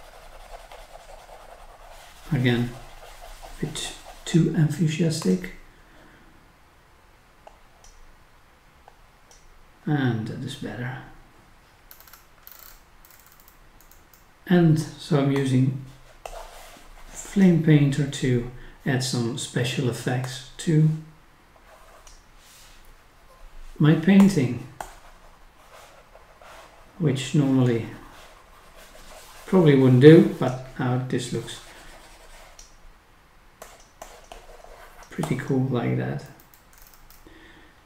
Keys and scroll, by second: 11.9 scroll down 1, 12.7-13.1 scroll up 1, 14.3-15.2 scroll down 1, 36.2 scroll up 1, 36.8 scroll down 1.